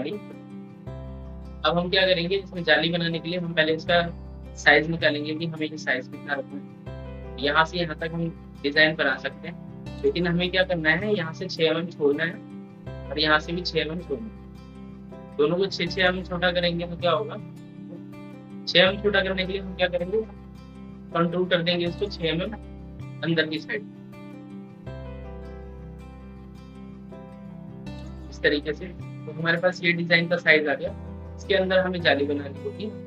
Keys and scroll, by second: 29.9 ctrl+k.